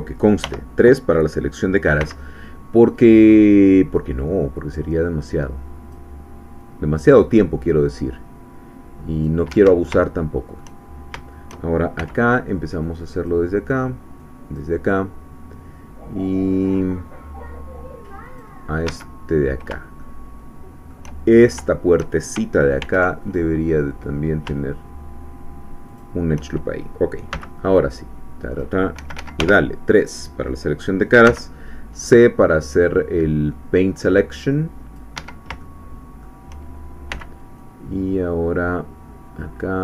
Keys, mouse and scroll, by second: 0.5 3, 2.0 c, 3.0-6.1 drag, 6.6-9.5 drag, 9.5 Escape, 10.0 shift+middle click, 11.3 shift+scroll up 2, 12.0 c, 12.8 click, 14.2 click, 18.2 click, 18.8 Escape, 19.3 scroll up 2, 20.0-21.1 shift+middle drag, 21.3-21.6 shift+scroll up 3, 21.7 shift+middle click, 22.8 ctrl+r, 23.3 ctrl+click, 25.9 shift+click, 27.3 c, 27.8 click, 29.0 Escape, 29.4 3, 31.2 c, 32.0 scroll down 2, 32.4-35.2 drag, 35.2 Escape, 35.6 shift+click, 37.1 c, 37.6-39.8 drag.